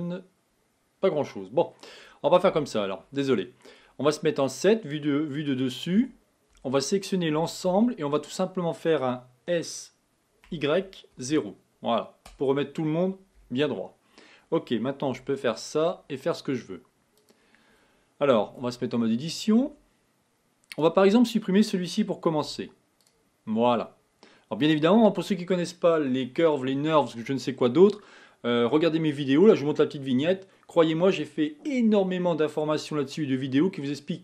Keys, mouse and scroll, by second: 2.7 KP_7, 6.0 Tab, 6.6 Tab, 7.4 a, 7.7 a, 9.6 s, 13.4 KP_1, 15.3 r, 18.7 Tab, 19.6 Tab, 20.7 click, 22.4 x, 24.6 click.